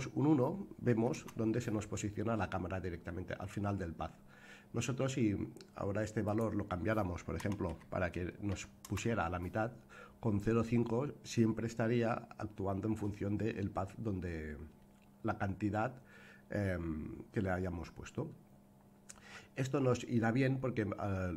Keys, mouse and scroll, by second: 6.2-9.8 drag, 20.1-20.5 scroll down 1.